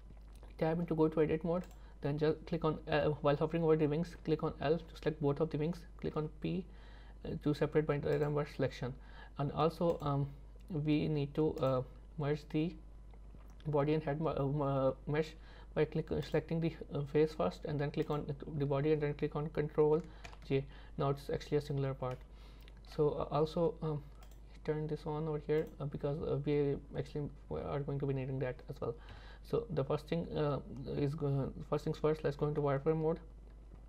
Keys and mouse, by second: 0.8 Tab, 4.3 l, 4.8 l, 6.2 p, 8.6 Tab, 10.0 click, 11.7 click, 16.3 click, 20.3 ctrl+j, 22.1 middle click, 24.3-26.9 drag, 29.1 KP_3, 32.5 z.